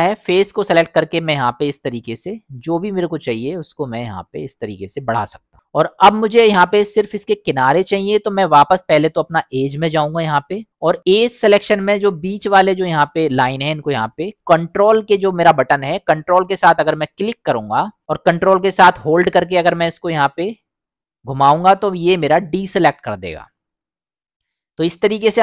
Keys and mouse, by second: 1.6 middle click, 2.3-5.0 shift+drag, 9.4 click, 10.6 middle click, 11.1 middle click, 19.4-25.4 ctrl+drag.